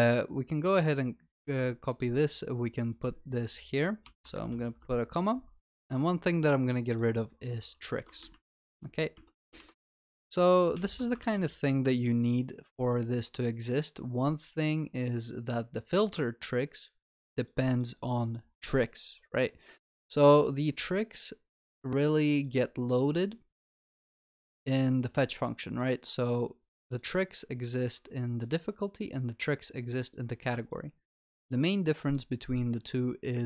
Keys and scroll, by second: 1.5 ctrl+c, 9.6 ctrl+y, 10.8 ctrl+alt+l, 11.2 ctrl+s.